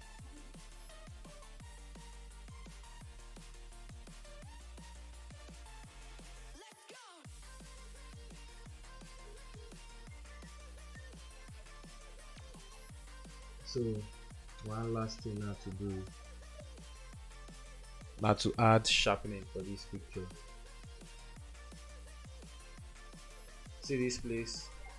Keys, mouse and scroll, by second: 4.1 [, 4.2 [, 4.5 [, 9.0 double click.